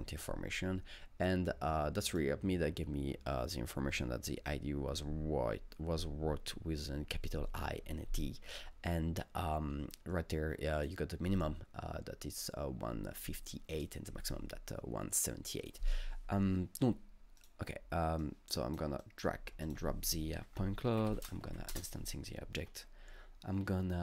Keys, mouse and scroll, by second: 1.3-4.5 drag, 9.9-13.2 drag, 13.7-15.6 drag, 15.6-17.4 drag, 17.4 click, 18.2 click, 20.1 click, 20.5 ctrl+space, 20.9 i, 21.1 Insert, 21.1 ctrl+space, 21.1 click, 21.5 Up, 21.7 Return.